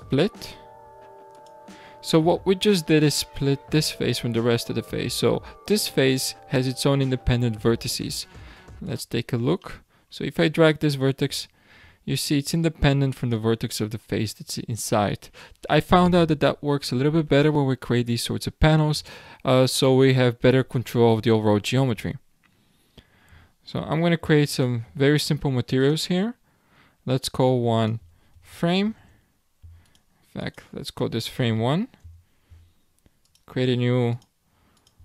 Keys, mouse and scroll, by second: 3.2-6.2 scroll up 2, 8.3 1, 8.8 click, 9.6-10.0 middle drag, 10.0-10.8 scroll down 1, 10.8 click, 24.5 click, 25.7-32.9 drag, 33.2-35.0 drag.